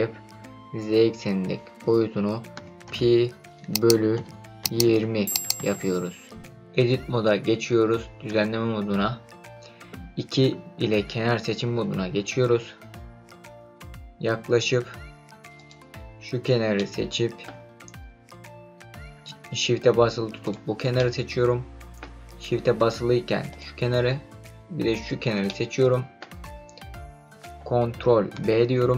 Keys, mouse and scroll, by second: 8.3 Tab, 10.8 2, 13.4-15.5 scroll up 7, 15.5 click, 16.7-17.4 middle drag, 20.4 shift+click, 20.9-22.0 middle drag, 23.5 shift+click, 24.9 shift+click, 25.4-26.2 middle drag, 26.4 scroll down 1, 28.3 ctrl+b.